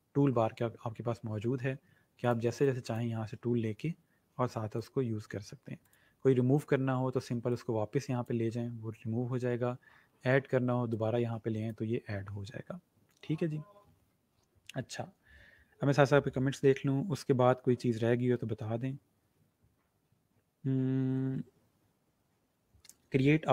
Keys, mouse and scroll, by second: 2.3 click, 4.8 click, 9.5-10.1 scroll up 2, 10.8 click.